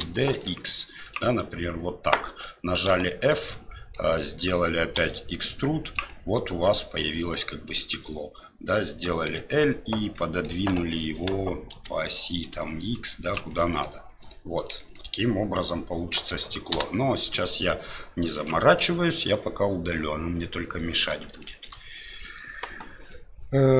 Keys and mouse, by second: 1.4-2.5 middle drag, 2.9 f, 3.5 middle click, 4.9 e, 6.0 middle click, 7.0 middle click, 9.2 l, 10.3 middle click, 11.1 g, 13.6 middle click, 14.9 shift+middle click, 15.2-16.3 middle drag, 16.7 Delete, 19.3-21.1 middle drag, 21.4 shift+middle click.